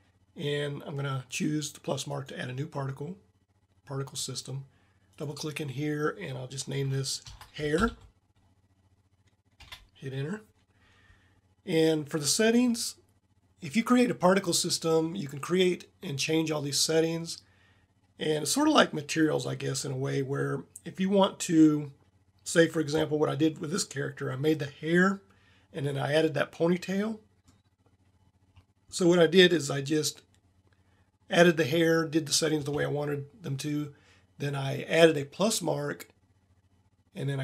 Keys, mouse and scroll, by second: 25.9 middle click, 26.3-27.0 middle drag, 27.1 middle click.